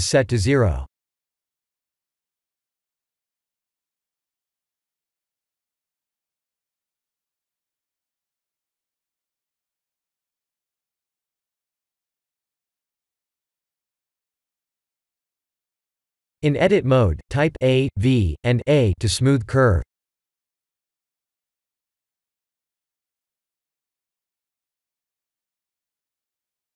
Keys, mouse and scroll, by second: 0.8 click, 3.8 ctrl+z, 7.3 g, 10.4 click, 10.8 g, 12.3 ctrl+z, 16.1 shift+middle click, 17.1 Tab, 18.6 Tab, 19.5 a, 20.0 v, 21.4 click, 22.4 r, 25.6 click, 26.0 click.